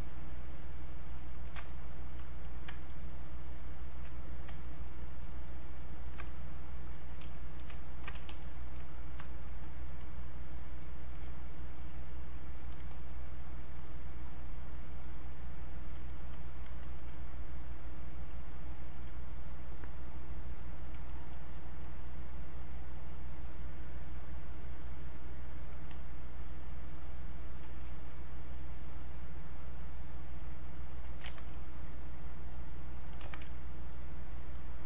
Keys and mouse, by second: 4.6 ctrl+click, 8.3 e, 8.6-10.3 drag, 10.3-11.8 alt+drag, 11.8-15.2 alt+drag, 15.2-19.3 alt+drag, 19.3-21.8 alt+drag, 21.8-24.0 drag, 24.0-27.6 alt+drag, 29.8-31.2 drag, 31.2 ctrl+z, 32.5 alt+click, 33.2 ctrl+z, 33.7-34.8 alt+drag.